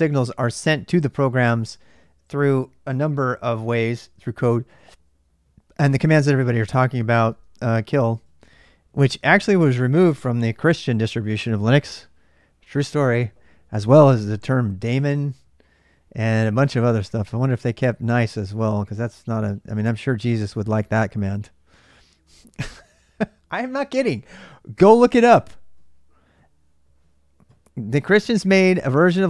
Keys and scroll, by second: 6.8-7.7 typing, 7.9 Return.